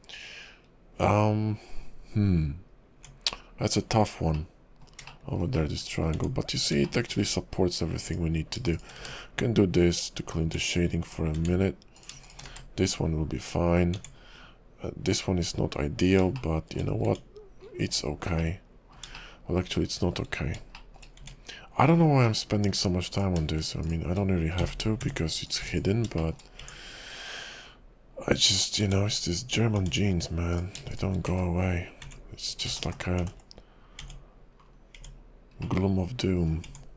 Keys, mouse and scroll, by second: 2.9 Tab, 4.3 middle click, 5.5 shift+middle click, 5.9 scroll up 3, 6.1 Tab, 6.8 shift+middle click, 7.4-7.8 scroll up 1, 8.1 click, 8.7 shift+click, 9.3 1, 10.4 Tab, 11.1 click, 11.3 Tab, 11.9 click, 12.1 Tab, 12.2 shift+click, 12.7 1, 13.9 Tab, 16.3 shift+middle click, 16.9 scroll up 2, 17.1 Tab, 17.6-18.4 scroll down 10, 18.4 middle click, 19.2 shift+middle click, 20.3 scroll up 5, 20.8 shift+middle click, 21.2 Tab, 22.2 middle click, 23.1 click, 23.8 shift+click, 24.7 j, 25.0 Tab, 25.5 click, 25.6 x, 26.2 shift+middle click, 26.5-26.8 scroll up 2, 26.6 Tab, 28.8 Tab, 29.8 Tab, 30.5 click, 30.9 shift+click, 31.6 1, 32.0 Tab, 32.8 ctrl+z, 33.0 ctrl+z, 33.3 ctrl+z, 34.0 Tab, 34.6-35.0 scroll down 3, 35.0 Tab, 35.6 middle click, 36.6 Tab.